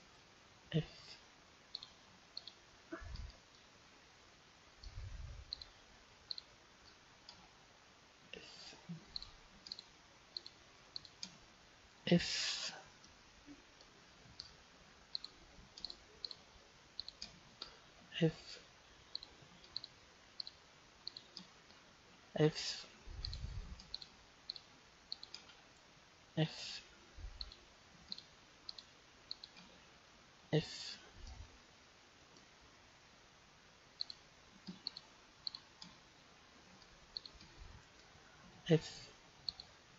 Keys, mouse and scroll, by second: 0.6 f, 1.8-3.5 right drag, 3.5-5.6 middle drag, 5.6-8.2 right drag, 8.2 f, 9.1-12.8 right drag, 12.0 f, 13.1-15.0 middle drag, 15.2-18.9 right drag, 18.0 f, 19.2-23.0 right drag, 22.1 f, 23.2-27.1 right drag, 26.4 f, 27.4-31.2 right drag, 30.4 f, 31.3-33.6 middle drag, 34.0-39.1 right drag, 38.4 f, 39.5-39.9 right drag.